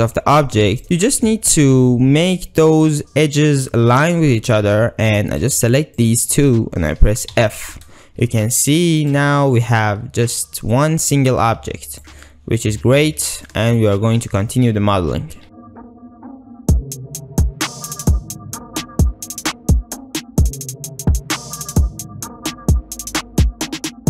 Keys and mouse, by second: 0.2 shift+click, 0.8 g, 1.1 g, 1.3 g, 5.1 2, 6.0 shift+click, 7.4 f, 8.4 ctrl+r, 9.6 drag, 9.9 ctrl+r, 11.6 ctrl+r, 12.3-12.6 ctrl+drag, 12.6 ctrl+middle click, 12.9 shift+middle drag, 13.5-13.8 shift+middle drag, 15.4 1, 15.6 g, 15.8 ctrl+r, 16.3 ctrl+middle click, 16.4 alt+shift+z, 16.4 Tab, 16.5 Tab, 16.8 ctrl+middle click, 16.9 ctrl+r, 17.0-24.0 typing, 18.4 alt+z, 18.5 ctrl+shift+click, 18.7 shift+click, 18.8 click, 19.1 click, 19.7 ctrl+x, 19.7 ctrl+z, 20.5 alt+z, 22.6 Tab, 22.8 Tab, 23.4 shift+click, 23.5 click.